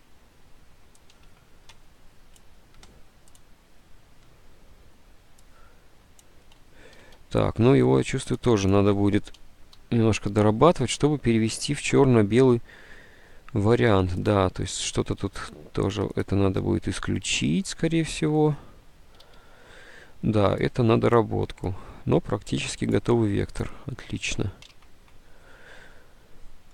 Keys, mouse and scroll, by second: 1.3 alt+Tab, 7.2 ctrl+u, 9.5 Delete, 9.5 ctrl+u, 9.8 Delete, 9.9 ctrl+u, 17.2 s, 19.3 ctrl+z, 24.3 ctrl+s, 24.7 alt+Tab, 24.7 ctrl+s.